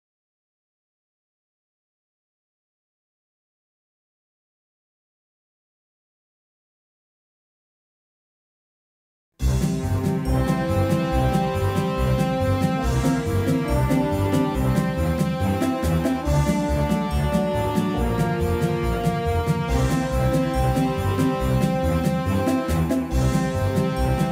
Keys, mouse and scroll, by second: 2.4-9.3 middle drag, 5.1-9.3 right drag, 7.3-9.3 drag, 9.5-11.2 middle drag, 13.2-15.5 drag, 13.2-19.5 middle drag, 13.2-14.8 right drag, 16.0-18.2 drag, 20.0-22.3 drag, 21.4 middle click, 23.1 shift+a.